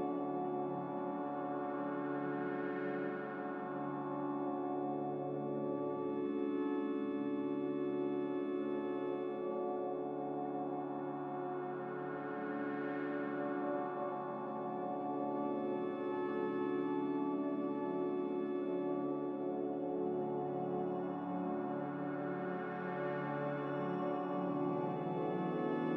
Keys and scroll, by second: 13.6 q, 25.6-25.9 typing.